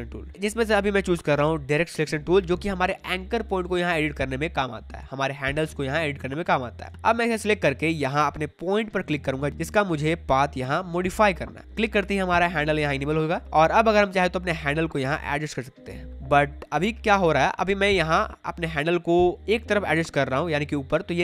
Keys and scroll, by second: 6.8 space, 12.5 space.